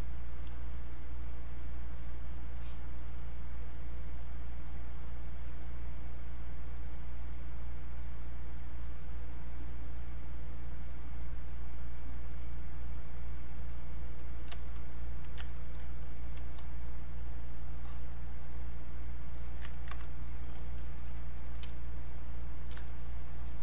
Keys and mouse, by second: 0.9-4.6 drag, 9.9 click, 12.4-17.8 drag, 19.4 alt+click, 19.7 ctrl+right click, 20.3 shift+click, 21.7 space, 22.0 click, 22.2 space, 22.9-23.6 shift+drag.